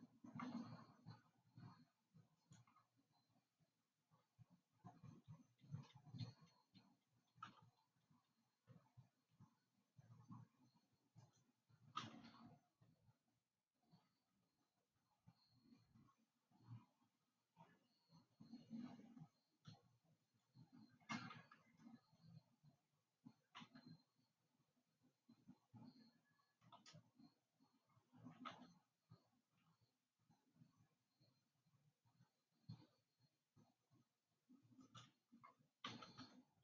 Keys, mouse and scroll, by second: 0.2-2.8 scroll down 4, 2.8 click, 7.9 g, 12.5 g, 22.1-24.3 scroll up 5, 24.5-27.8 shift+middle drag, 29.0 g.